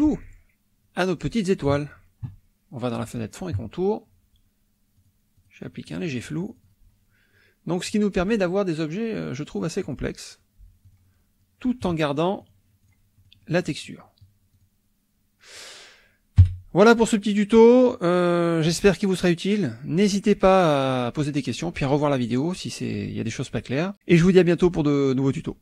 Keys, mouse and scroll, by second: 0.2 click, 3.0 click, 5.0 click, 5.4 click, 5.7-6.9 drag, 7.9 click, 9.4 click, 10.8 click, 12.4 click, 12.8 click, 13.1 middle click, 14.0 click, 14.5 click, 16.4 KP_5, 17.9 click.